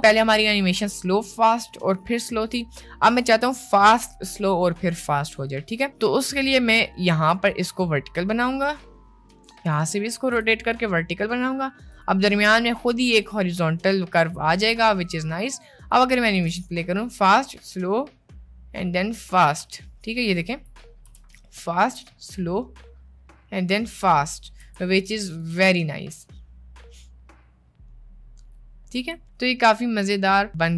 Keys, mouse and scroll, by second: 6.8 click, 7.4 r, 9.7 click, 10.5 r, 15.5 click, 16.4 space, 19.6 space, 20.4 click, 21.1 space, 21.6 middle click, 24.8 space, 24.9-25.6 drag, 25.6 space, 29.0 space.